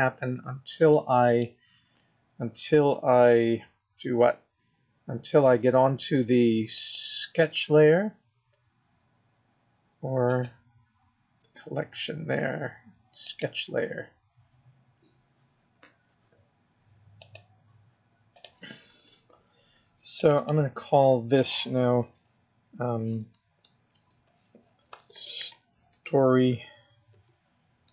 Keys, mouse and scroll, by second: 0.7 click, 6.7 click, 8.6-9.8 scroll up 2, 10.3 click, 13.2 click, 20.6 click, 20.7 click, 26.5 BackSpace.